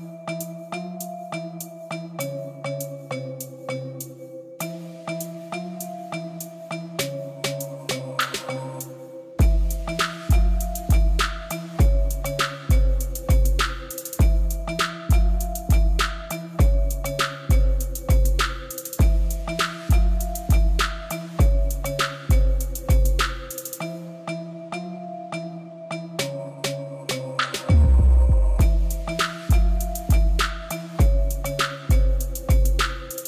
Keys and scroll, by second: 5.1 Tab, 9.2 i, 12.9 ctrl++, 18.7 Tab, 19.5 g, 19.7 z, 26.9 Tab, 27.7 a, 29.8 Tab, 30.5 g, 30.8 z.